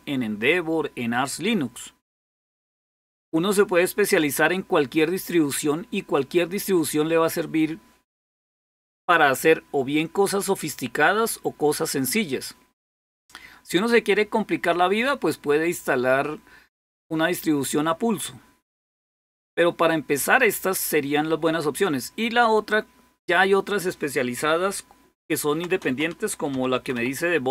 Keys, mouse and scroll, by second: 1.8-15.4 drag, 15.4-16.4 scroll up 1, 25.0-27.5 typing.